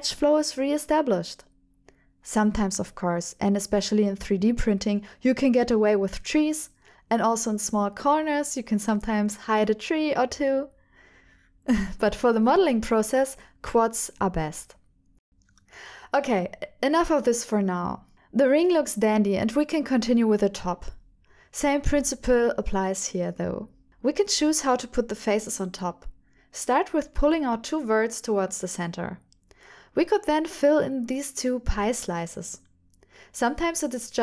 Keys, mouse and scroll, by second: 1.1 shift+middle click, 1.6 middle click, 2.3 right click, 2.5 middle click, 2.5 right click, 2.5 middle click, 3.0 right click, 3.1 middle click, 4.2 alt+click, 5.2 alt+click, 6.2 alt+click, 6.8-9.3 middle drag, 9.8 middle click, 11.4 ctrl+alt+shift+middle click, 12.5 middle click, 13.0 1, 13.4 middle click, 14.3 middle click, 15.2 shift+click, 16.1 e, 16.5 x, 17.7 click, 19.6 g, 19.8 y, 20.6 click, 21.9 click, 22.9 e, 23.2 y, 24.0 click, 24.6 click, 25.3 e, 25.6 x, 26.4 click, 26.8 shift+middle click, 27.2-28.9 middle drag, 30.2 ctrl+z, 30.3 click, 30.9 ctrl+click, 31.6 f, 31.9 click, 32.1 ctrl+click, 33.3 middle click, 33.3 f, 34.1-34.2 middle drag.